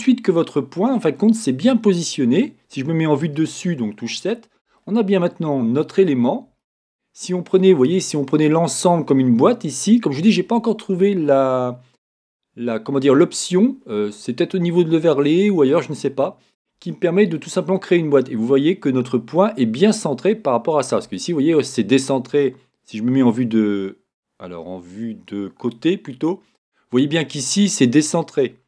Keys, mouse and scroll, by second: 0.0-28.6 middle drag, 25.6 KP_3.